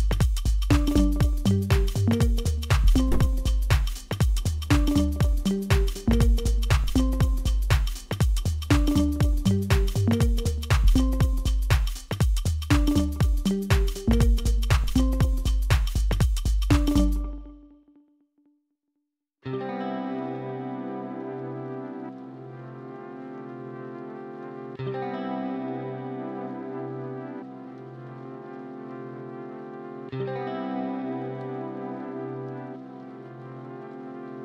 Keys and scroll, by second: 0.7 Tab, 1.3 ctrl+a, 3.6 Tab, 7.1 e, 8.7 1, 9.9-11.4 typing, 10.0 Return, 15.5-16.5 typing, 17.7 Tab, 18.3-19.5 typing, 20.6 7, 21.4 s, 23.0 ctrl+a, 23.6 Tab, 24.0 q, 30.4 Tab, 31.9 Tab.